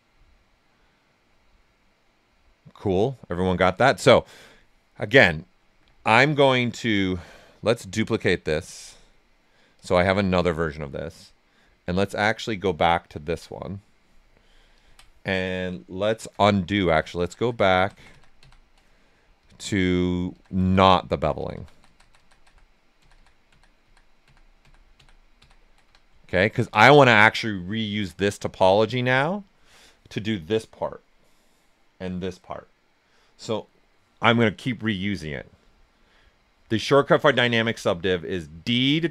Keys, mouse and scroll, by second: 5.5 right click, 5.5 typing, 6.3-7.7 alt+right drag, 7.7 click, 8.6-11.8 drag, 11.8 click, 16.7 ctrl+z, 19.3 click, 19.8 ctrl+right click, 20.3 ctrl+z, 26.2 ctrl+z, 26.9 alt+right click, 27.9 shift+f.